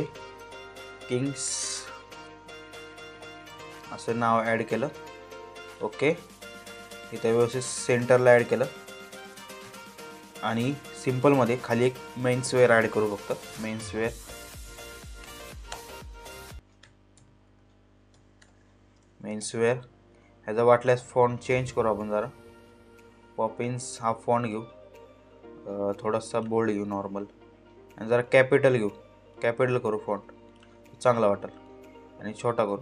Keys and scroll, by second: 0.0-1.1 typing, 2.9 ', 3.2 s, 8.1 Up, 9.2 Right, 13.8-18.5 typing, 19.0 ctrl+a.